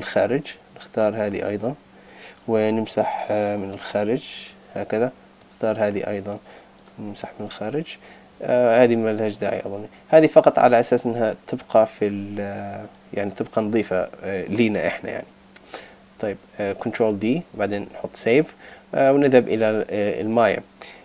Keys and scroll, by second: 8.9 super+z, 16.2 super+d, 17.6 super+s, 18.5 super+Tab.